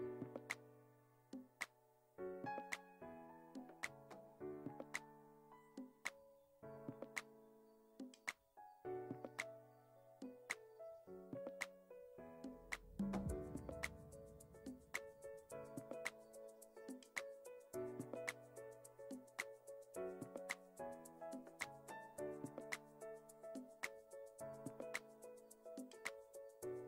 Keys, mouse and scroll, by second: 0.7 e, 1.8 scroll down 4, 2.0 shift+middle click, 2.2-7.0 typing, 2.7 Tab, 3.3 scroll up 2, 3.4 shift+middle click, 5.2 shift+middle click, 5.3 scroll up 4, 5.4 Tab, 6.5 Tab, 6.6 scroll down 3, 6.7 shift+middle click, 6.8 click, 8.2 click, 9.1 scroll down 3, 9.2 shift+middle click, 9.5 r, 10.9-14.6 typing, 12.3 scroll up 2, 12.5-13.0 shift+middle drag, 15.1 scroll up 2, 15.2 Tab, 15.3 shift+middle click, 15.5 click, 16.4 click, 16.6 ctrl+r, 18.5 2, 18.7 alt+click, 19.2 s, 19.9 3, 20.1 alt+click, 20.3 alt+click, 20.8 alt+e, 21.4 Tab, 21.6 scroll down 1, 21.6 click, 21.7 right click, 22.0 alt+z, 22.4-23.0 scroll down 2, 22.7 click, 23.0 middle click, 23.1 click, 23.3 middle click, 23.6 shift+a, 24.6 scroll down 4, 24.9 click, 26.1 alt+middle click, 26.2 alt+middle click, 26.6 g.